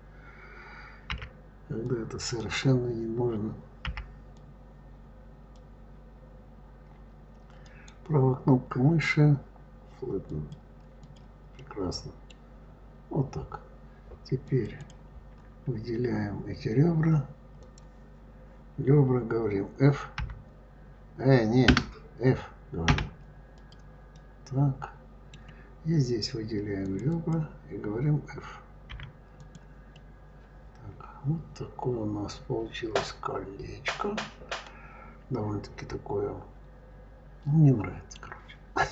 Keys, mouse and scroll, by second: 0.9 b, 3.7 b, 7.5-10.3 right drag, 10.3 click, 10.8 click, 11.4-12.6 middle drag, 12.6-14.3 scroll up 1, 14.3 click, 14.6 click, 15.5-17.4 scroll down 2, 17.4 click, 20.0 g, 22.7 f, 23.4 click, 24.0-26.6 middle drag, 26.6 click, 27.0 click, 28.7 f, 29.2 click, 29.8-32.8 middle drag.